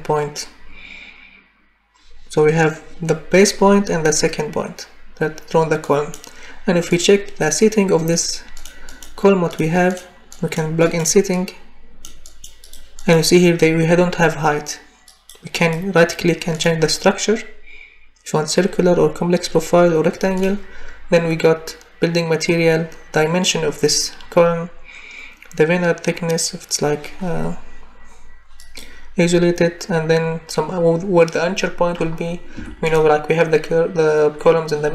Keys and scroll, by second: 32.6 Escape.